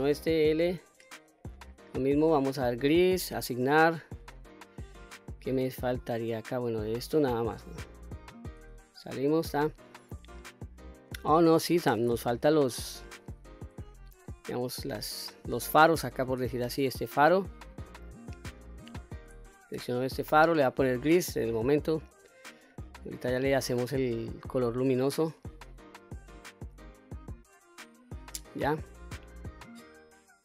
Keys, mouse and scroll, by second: 0.4 l, 1.7-2.2 scroll up 3, 2.8 click, 3.4 click, 4.0-4.4 scroll down 1, 4.4 middle click, 5.3-6.0 scroll up 3, 6.3-6.7 scroll down 1, 6.7 middle click, 8.1-8.9 scroll down 1, 9.1 Tab, 10.1 click, 11.7 Tab, 12.1-12.7 scroll up 1, 12.7 middle click, 12.7 scroll up 1, 14.0 shift+middle click, 14.9 click, 16.0 l, 17.0 middle click, 18.9 shift+click, 19.8 l, 21.4 click, 22.0 click, 22.8-23.2 scroll down 1, 23.2 click, 23.7 middle click, 24.7 middle click, 26.3 middle click, 27.3-28.6 middle drag, 29.1-29.7 scroll down 1, 29.7-30.4 middle drag.